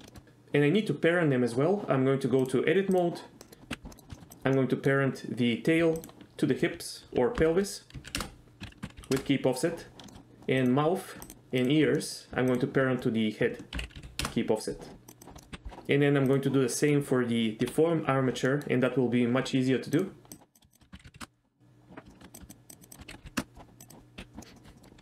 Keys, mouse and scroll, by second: 0.1 shift+middle click, 2.5-3.1 drag, 3.5 middle click, 3.7 KP_Divide, 3.9 middle click, 4.2 shift+middle click, 4.3 click, 4.7 middle click, 6.1 shift+click, 7.5 ctrl+p, 8.6 ctrl+z, 8.8 ctrl+p, 10.1 shift+middle click, 10.7 click, 11.7 shift+click, 12.1 middle click, 13.8 ctrl+p, 15.1 click, 15.4 middle click, 16.8 middle click, 18.6 middle click, 20.1-20.4 drag, 20.7 shift+click, 20.9 ctrl+p, 22.1 shift+middle click, 22.4 click, 23.0 ctrl+p, 23.0 ctrl+z, 23.1 ctrl+p, 23.8 click, 24.4 middle drag, 24.6 shift+middle drag, 24.8 middle click.